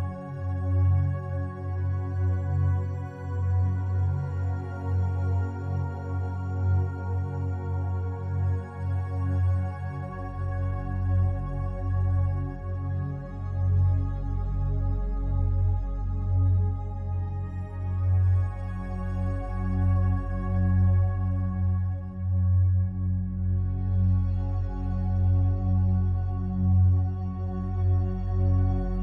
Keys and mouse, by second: 0.1 click, 1.2-2.0 drag, 2.6 ctrl+s, 3.5 0, 3.8 Return, 4.6 i, 5.0-5.9 drag, 5.4 space, 6.3 space, 7.2 ctrl+z, 7.7 ctrl+z, 10.9-14.4 drag, 14.6-16.0 drag, 17.4-18.7 drag, 18.8-20.5 drag, 20.7 Delete, 21.2-22.6 drag, 25.5 s, 26.4 Escape.